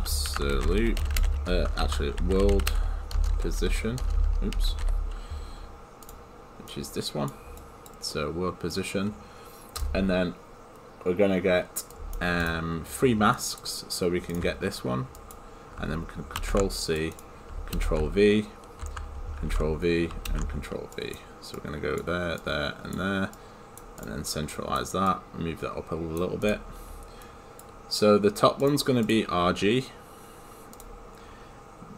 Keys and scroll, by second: 3.2 BackSpace.